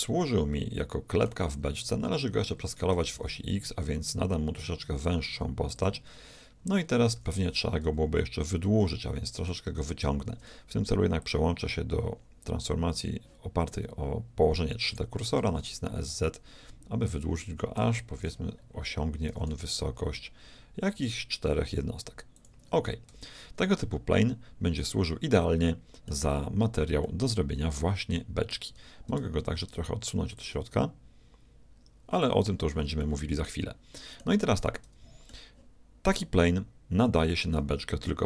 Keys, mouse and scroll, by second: 2.9 s, 7.1 s, 11.2-13.2 drag, 15.4 s, 18.2 KP_1, 19.4 s, 23.1 Tab, 24.0-25.8 middle drag, 27.1-28.8 middle drag, 28.8 Tab, 30.4-32.2 drag, 32.2 click, 33.0-36.5 middle drag.